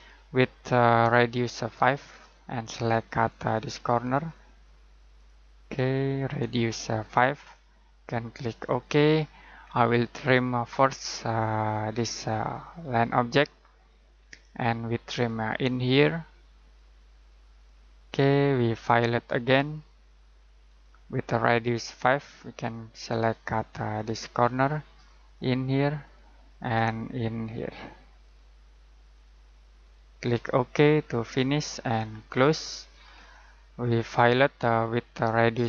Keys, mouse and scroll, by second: 1.1 click, 3.2 click, 8.6 click, 9.6-11.1 scroll down 1, 11.8 click, 12.4-12.8 scroll down 1, 12.8 click, 14.1-14.6 scroll down 1, 14.6 click, 18.4 scroll down 1, 18.6-20.6 scroll up 1, 20.6 click, 26.1 click, 33.1-34.4 scroll up 1, 34.4 scroll down 1.